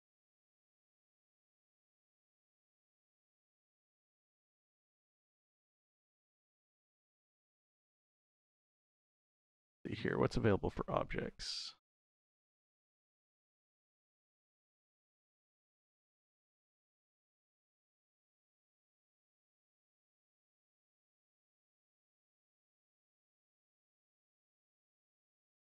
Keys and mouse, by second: 0.0 click, 0.5-2.2 drag, 8.5 click, 17.2 click, 17.7-19.0 drag.